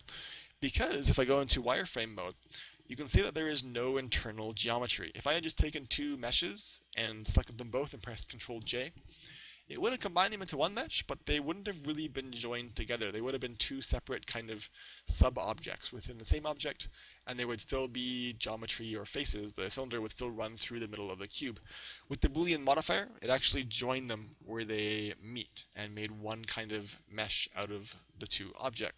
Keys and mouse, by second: 1.8 z, 2.6-4.6 middle drag, 21.1-22.9 middle drag, 22.5 z.